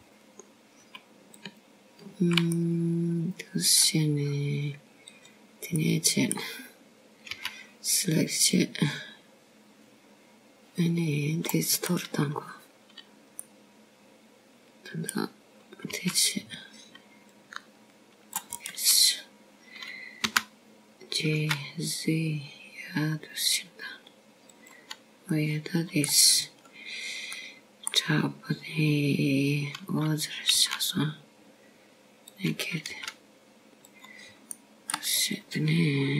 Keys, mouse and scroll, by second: 1.7 click, 4.2 alt+click, 5.4 middle click, 7.1-7.9 scroll up 2, 7.9 click, 7.9 scroll up 1, 8.7 middle click, 10.2 c, 14.8 right click, 16.3 middle click, 18.8 c, 21.9-23.2 scroll down 2, 23.2 g, 28.2 middle click, 29.2-30.3 scroll down 3, 30.3 middle click, 31.3-31.8 scroll up 2, 33.4 s, 35.8 g.